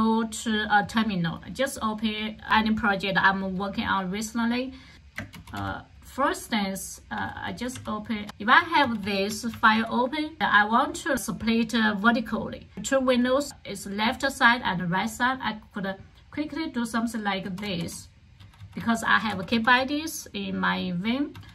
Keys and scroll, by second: 5.1-6.1 typing, 7.1-10.3 typing, 8.2 Return, 17.2-20.0 typing, 21.3-21.5 typing.